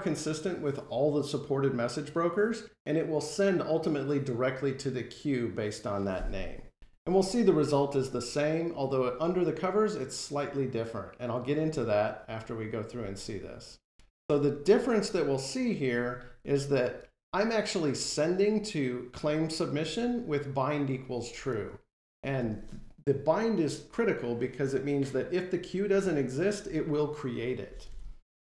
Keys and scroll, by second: 6.3 F5.